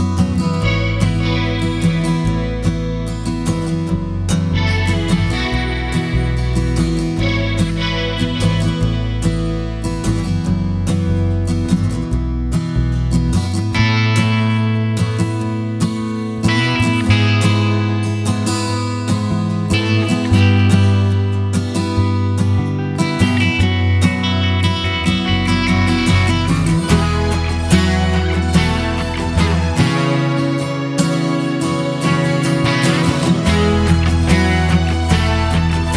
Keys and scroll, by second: 0.0-0.4 typing, 2.0 super+a, 10.9 super+t, 20.0 Return, 26.4 super+j.